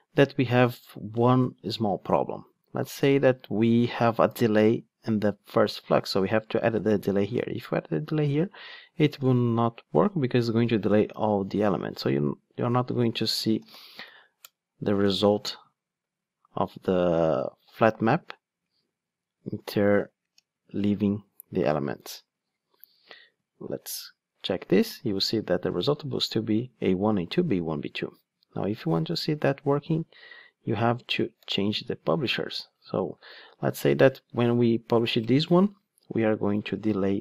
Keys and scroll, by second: 9.8 Return, 14.5 Return, 23.6 ctrl+shift+d, 30.9 super+x.